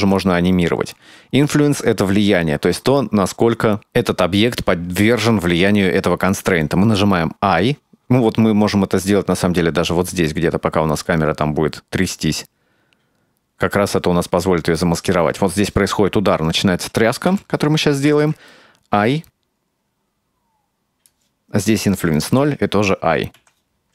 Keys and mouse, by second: 8.2-14.8 drag, 18.5-20.0 drag, 21.1-21.6 drag, 22.7-23.9 drag.